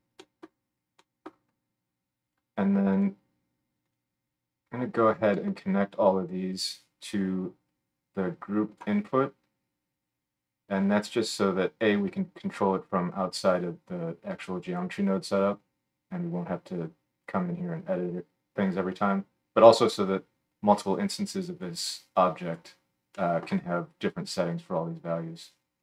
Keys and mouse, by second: 2.3-2.9 middle drag, 2.9 click, 3.0-3.8 middle drag, 3.8 click, 3.9-4.3 middle drag, 4.3-25.8 drag.